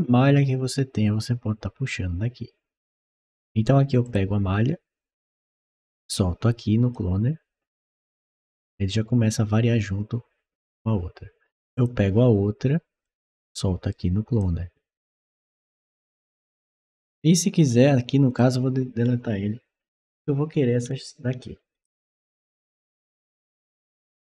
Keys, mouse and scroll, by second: 3.9 click, 5.2-6.7 drag, 11.6 click, 12.9-14.2 drag, 18.1 click, 21.6 click.